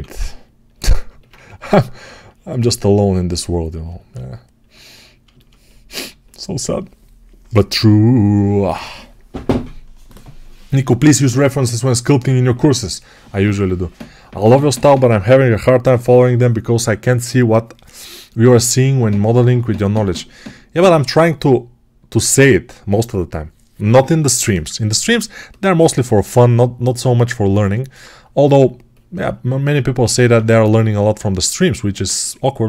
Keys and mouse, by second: 1.2 2, 30.2 2.